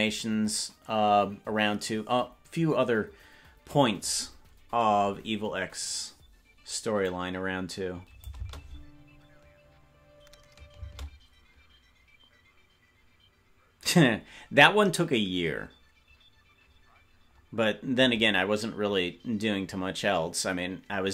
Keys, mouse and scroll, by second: 7.1-10.0 drag, 10.0 space, 11.0 space.